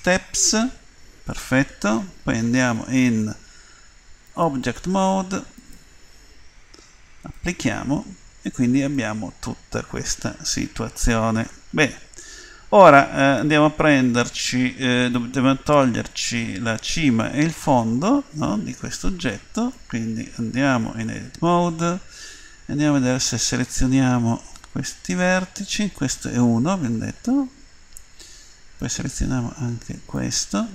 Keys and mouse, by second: 4.6-6.8 drag, 7.3-9.0 drag, 8.3 Tab, 9.0-10.8 middle drag, 14.5-16.8 middle drag, 17.1-18.4 middle drag, 19.4 middle click, 23.2-26.4 right drag, 26.4-27.6 middle drag, 27.9-30.7 middle drag.